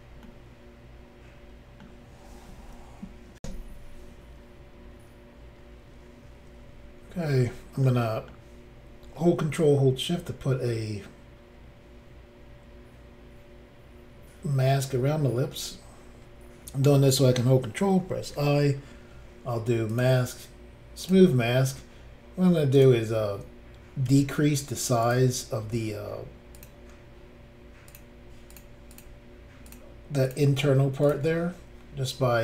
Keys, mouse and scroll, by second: 0.2 middle click, 3.4 Insert, 6.8-7.8 scroll up 3, 7.8 middle click, 18.0 ctrl+i, 19.9 click, 20.0 click, 21.0 click, 21.1 click, 22.8 click, 24.1 f, 25.0 click, 26.6 click, 26.6 click, 27.9 click, 28.0 click, 28.5 click, 28.6 click, 28.9 click, 29.0 double click, 29.7 double click, 29.7 double click, 30.3 double click, 30.5 double click, 31.0 click, 31.1 click.